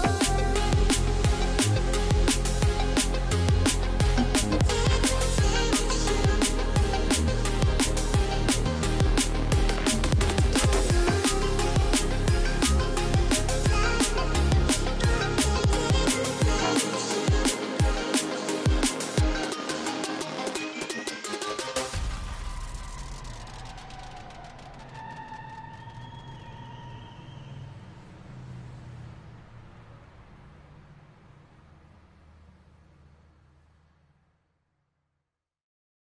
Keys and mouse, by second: 2.1 middle click, 3.9 s, 5.1 middle click, 5.3 middle click, 5.5 middle click, 7.2-8.8 middle drag, 10.5 shift+middle click, 10.5 shift+click, 11.1 right click, 11.8 Delete, 13.1 click, 13.6 middle click, 16.0 click, 16.7 s, 17.4 right click, 17.9 right click, 20.9-23.2 middle drag, 23.8 middle drag, 24.5 s, 25.0 middle click, 25.6 middle click, 26.0 middle click, 27.2 shift+middle click, 28.6 middle click, 29.5 middle click, 30.0 shift+middle click, 30.7 shift+middle click, 31.2 click, 32.1 ctrl+s, 34.1 click, 35.0-35.3 middle drag, 35.7 click.